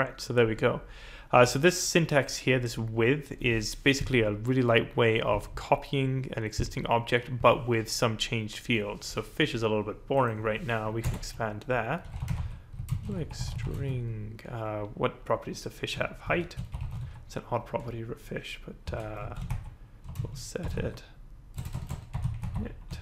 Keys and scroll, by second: 11.0 Return, 11.8-14.1 typing, 16.0-17.5 typing, 18.6-23.0 typing.